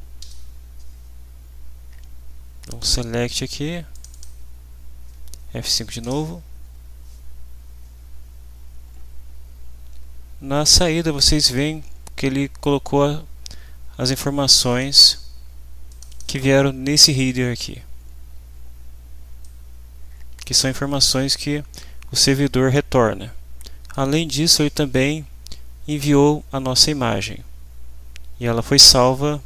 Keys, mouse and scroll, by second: 0.2 F5, 2.6 click, 3.9 click, 6.0 F5, 14.7 click, 16.4 click, 19.4-24.1 drag.